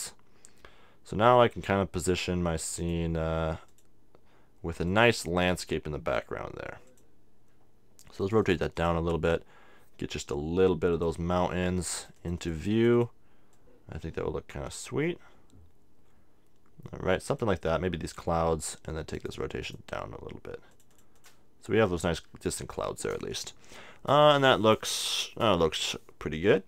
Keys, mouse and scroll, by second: 2.8-6.7 drag, 6.9-10.5 drag, 10.9-15.3 drag, 19.1-22.9 drag, 23.0 click.